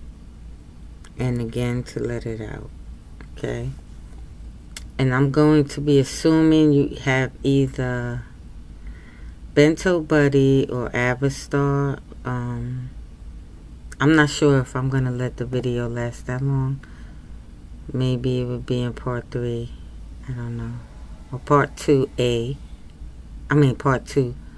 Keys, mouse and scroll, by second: 1.1 n, 4.3 scroll up 1, 6.6-24.5 scroll up 1.